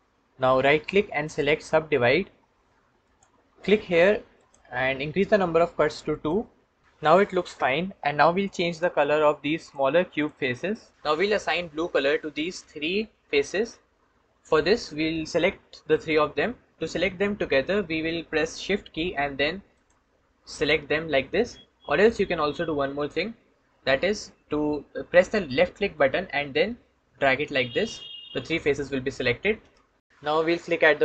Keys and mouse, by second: 4.2 click, 6.0 click, 19.6 shift+click, 20.4 shift+click, 21.2 shift+click, 22.9-27.8 drag.